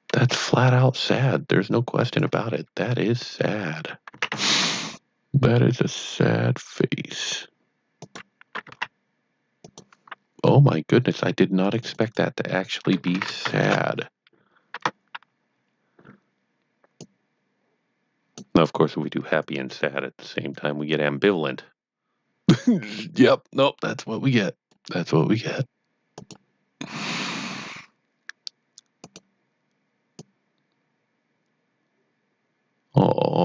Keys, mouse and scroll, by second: 1.7-2.4 typing, 2.0 click, 3.8-4.8 typing, 7.9 click, 8.3-9.1 typing, 9.7 click, 11.6 click, 11.8 double click, 12.0 click, 13.2-13.9 typing, 14.7 Tab, 15.5 scroll down 1, 17.0 click, 29.0-33.4 click.